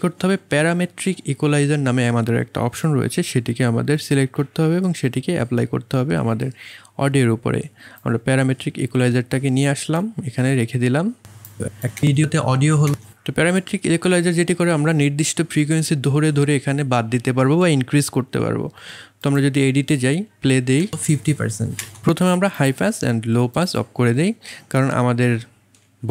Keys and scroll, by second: 11.9 space, 20.8 space.